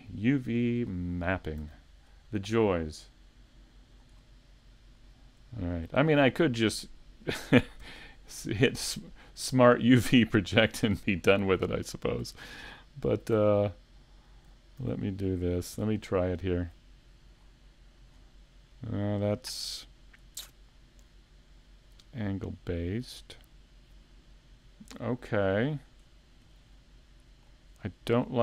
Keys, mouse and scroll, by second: 1.3 scroll down 2, 1.6 a, 2.1 middle click, 4.1-4.6 scroll down 3, 4.5 middle click, 5.1 scroll down 2, 5.5 shift+middle click, 6.0 scroll down 1, 6.4 shift+middle click, 7.0 middle click, 14.9 a, 20.4 shift+middle click, 20.4 scroll down 4, 21.0 click, 25.1 shift+middle click, 25.1 scroll down 2.